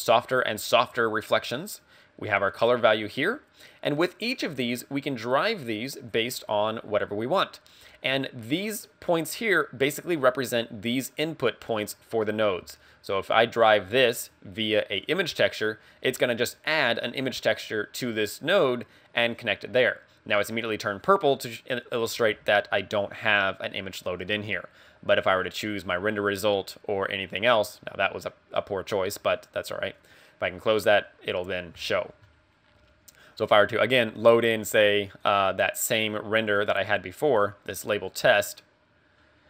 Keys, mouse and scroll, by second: 2.5 click, 3.5 click, 11.2 click, 13.4 click, 16.1 click, 24.3 click, 26.4 click, 30.0 click, 33.6 click.